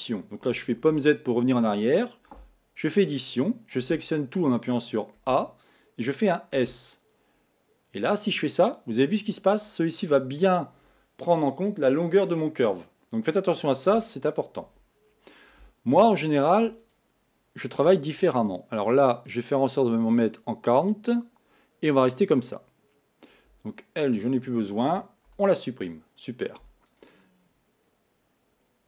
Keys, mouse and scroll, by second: 0.9 z, 2.5 Tab, 3.9 a, 5.2 a, 6.8 s, 14.7 Tab, 16.8 click, 19.3-22.3 drag, 24.1 click, 25.3 x, 27.2 click.